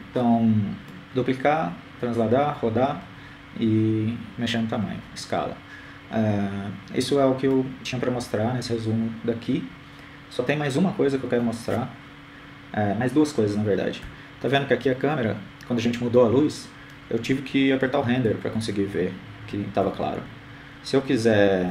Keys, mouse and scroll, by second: 3.7-4.2 scroll down 2, 4.2-5.0 scroll up 2, 5.0-6.4 middle drag, 7.1-8.5 scroll down 1, 11.6-13.0 middle drag, 18.2 KP_0.